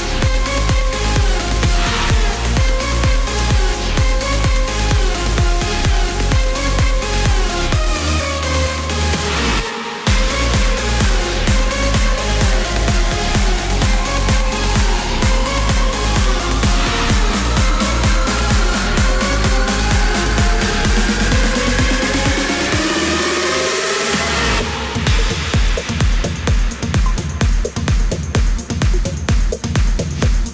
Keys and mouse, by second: 1.1 right click, 2.7 click, 4.0 click, 5.1 click, 6.0 click, 7.2 click, 8.1 click, 8.9 click, 10.7-13.0 typing, 14.2 KP_4, 14.2 KP_6, 14.4 KP_4, 16.3 KP_6, 17.4 KP_4, 19.4 KP_Add, 19.5 KP_Add, 20.0 KP_Add, 20.8 KP_Add, 25.0 right click.